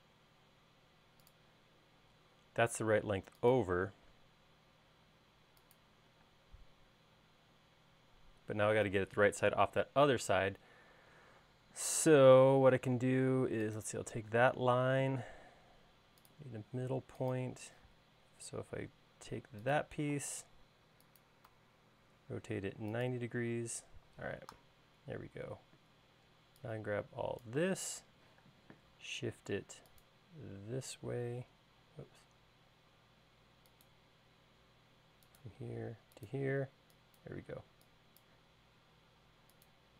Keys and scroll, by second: 7.1 space, 15.4 l, 18.6 q, 24.3 space, 29.2 m, 37.3 e.